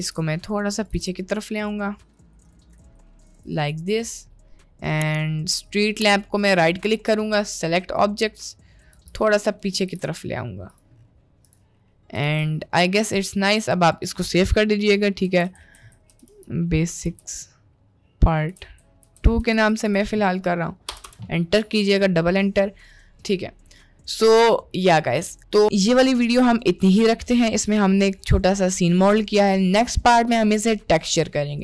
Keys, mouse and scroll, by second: 0.0 g, 1.0 g, 2.0 r, 2.4 g, 2.8 g, 3.3 r, 4.3-4.9 middle drag, 6.5-8.7 right drag, 9.1 g, 9.4 middle click, 9.8 g, 11.5 click, 11.9 middle click, 12.3 ctrl+s, 23.3-24.9 middle drag, 27.1-27.5 middle drag, 27.7-28.5 middle drag, 29.3 middle click.